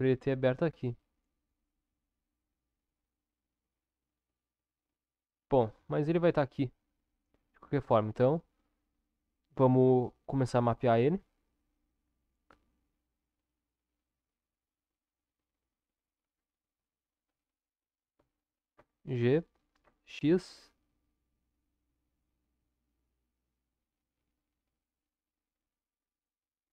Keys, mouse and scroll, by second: 18.7 g.